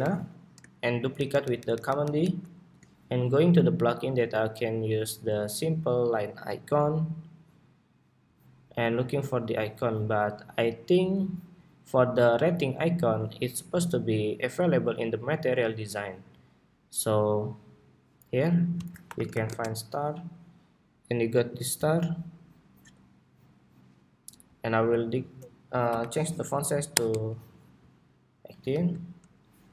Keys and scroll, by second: 28.5 super+d.